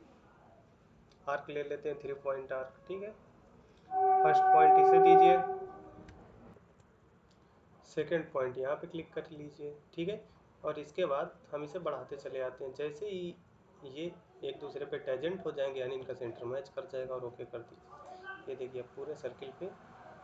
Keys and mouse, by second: 6.3 shift+2, 18.8 middle click.